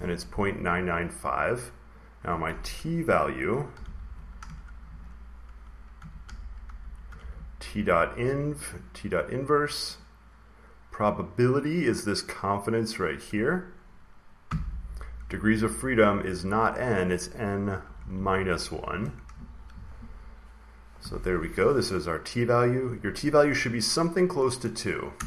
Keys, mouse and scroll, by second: 1.0 click, 1.9 click, 3.4-4.2 typing, 4.7 Right, 5.6-7.5 typing, 8.5 click, 9.8 click, 12.5-14.6 drag, 16.6-17.7 drag, 17.5-20.1 typing, 25.0 Return.